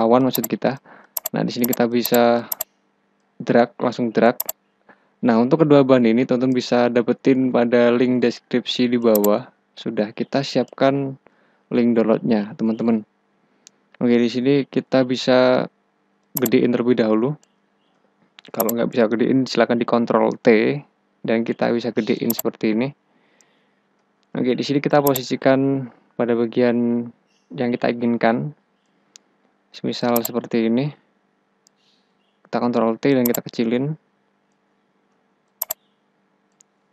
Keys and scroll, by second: 11.1 Return, 17.6 Return, 20.5 ctrl+t, 24.1 Return, 31.7 ctrl+t, 35.3 Return.